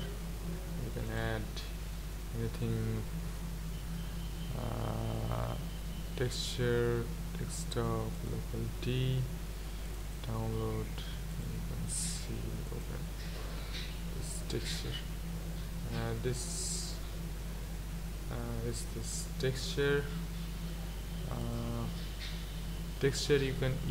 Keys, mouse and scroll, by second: 21.5-23.9 drag.